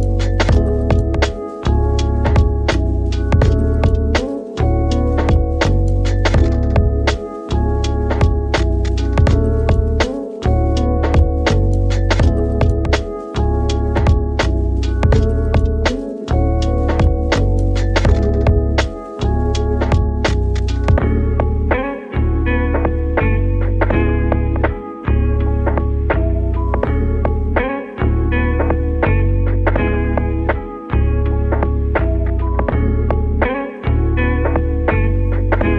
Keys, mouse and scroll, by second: 0.6 right click, 1.1 scroll down 2, 1.4 middle click, 2.0 Tab, 2.3 middle click, 2.9 scroll down 4, 3.1-5.0 middle drag, 5.0 scroll up 2, 5.2 click, 6.1 Tab, 6.6 Tab, 7.6 shift+a, 8.6 click, 8.9-9.3 scroll down 5, 9.3 s, 9.8 click, 9.9 g, 10.2 z, 10.7 click, 11.0 s, 11.6 click, 11.8-12.2 scroll up 5, 12.2 s, 12.6 click, 13.2-14.2 right drag, 14.2 ctrl+z, 15.1 g, 15.4 z, 15.9 click, 16.1 s, 16.5 click, 16.8-17.5 scroll up 2, 17.5 ctrl+3, 18.0 shift+middle click, 18.5-19.8 right drag, 18.8 click, 19.8 click, 20.4 scroll up 1, 20.7 g, 21.0 z, 21.5 click, 21.7 Tab, 22.0 middle click, 22.3 3, 22.8 click, 23.1 middle click, 23.7 e, 24.3 click, 25.1 s, 26.6 click, 26.9 middle click, 27.7 s, 28.5 click, 28.7 g, 30.0 click, 30.4-31.8 middle drag, 31.8 2, 32.3 alt+click, 32.6 middle click, 33.1 g.